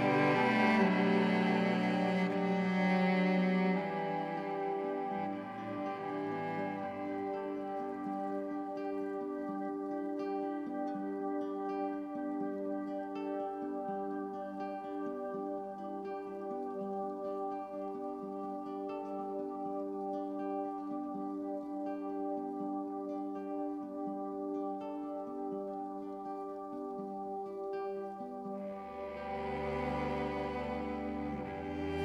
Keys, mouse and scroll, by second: 0.2 n, 1.8 b, 2.2 click, 3.4 Delete, 4.0 click, 6.8 click, 7.4 ctrl+alt+click, 8.3 ctrl+alt+click, 8.8-10.0 alt+shift+drag, 9.9 typing, 10.5 Tab, 11.7-13.5 typing, 13.0 click, 14.7-16.9 typing, 15.3 click, 17.8-22.7 shift+drag, 22.8-29.8 drag, 30.4-32.0 drag.